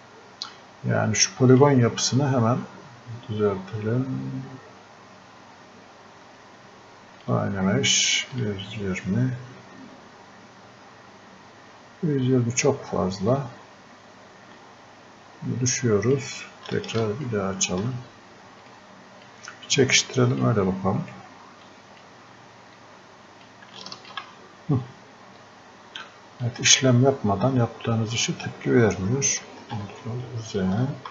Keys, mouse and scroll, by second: 1.5 click, 2.5-2.9 scroll up 1, 7.2 click, 13.3 click, 18.7 right click, 18.8 click, 20.3 click, 21.0 right click, 21.7-29.7 drag, 29.7 ctrl+z.